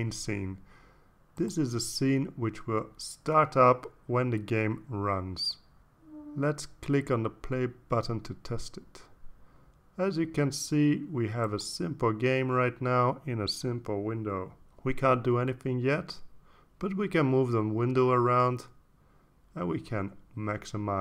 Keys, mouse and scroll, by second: 1.1 click, 3.5 click, 7.7 ctrl+s, 9.8 click, 11.6-12.2 drag, 12.4 click, 14.4-17.7 drag, 20.1 click.